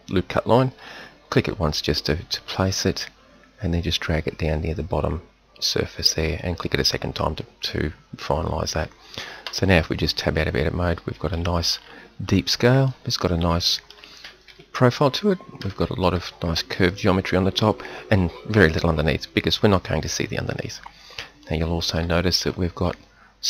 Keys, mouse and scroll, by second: 9.4 Tab, 10.2 middle drag, 11.8-12.9 middle drag, 14.5 KP_1.